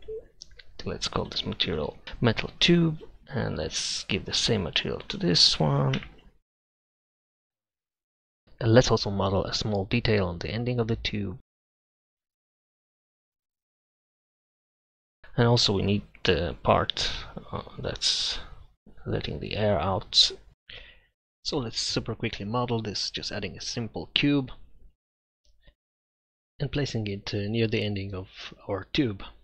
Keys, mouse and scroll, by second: 7.6 e, 9.3-10.4 drag, 10.7 click, 12.2 shift+s, 12.9 e, 15.8-17.9 middle drag, 20.5 Tab, 20.5 shift+s, 21.1 Tab, 22.0 shift+a, 25.1 Tab, 25.9 s, 28.7 s.